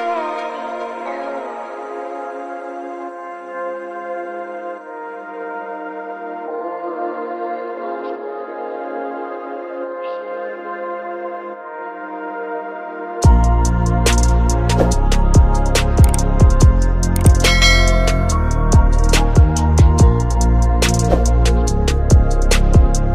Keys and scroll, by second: 0.5 ctrl+space, 4.3 space, 5.4 ctrl+space, 5.9 ctrl+space, 7.0 space, 13.8 space.